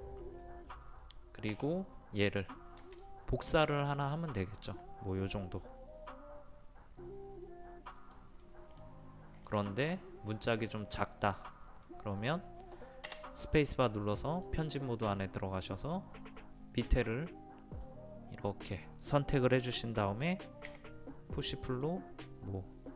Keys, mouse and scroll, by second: 1.5 m, 2.9 ctrl+click, 8.4 middle click, 13.5 space, 14.0-19.5 drag, 20.7 p, 21.7 click.